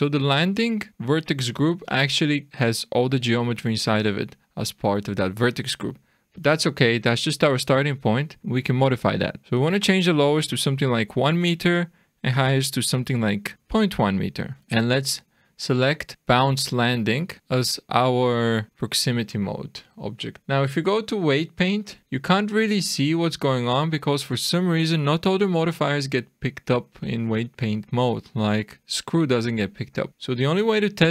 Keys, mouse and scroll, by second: 9.4 click, 14.8 click, 20.4 click, 30.1 click.